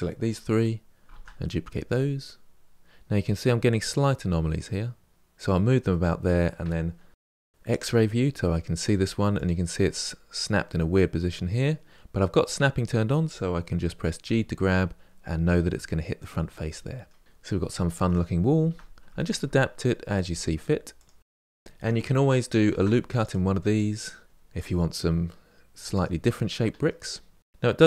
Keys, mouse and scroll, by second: 0.9 shift+d, 5.7-7.1 middle drag, 7.1 1, 8.0 click, 9.6 click, 10.1-12.6 middle drag, 14.0 g, 16.4 middle click, 17.2 scroll down 3, 17.2 middle click, 17.6 scroll up 3, 17.8 Tab, 18.1 shift+middle click, 18.4 click, 18.6 g, 19.1 middle click, 19.6 click, 19.8 g, 20.5-22.4 middle drag, 22.4 ctrl+r, 23.5 click, 24.2 g, 24.6 middle click, 25.1 ctrl+r, 25.3 click, 25.4 g, 25.9 g, 26.3 scroll up 3, 26.5 click, 26.7 g, 27.1 click, 27.2 g, 27.7-27.8 middle drag.